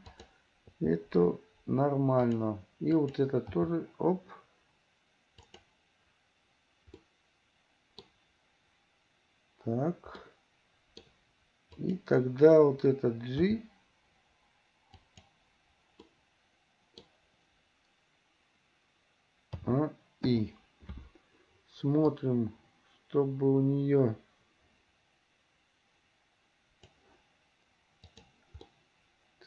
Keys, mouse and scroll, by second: 0.2 click, 0.9 g, 3.2 click, 3.6 g, 7.1-8.3 middle drag, 10.3 middle click, 11.9 click, 13.7 g, 16.2-17.3 middle drag, 19.7 a, 20.5 i, 22.3-27.1 drag, 28.2 click, 28.8-29.4 middle drag.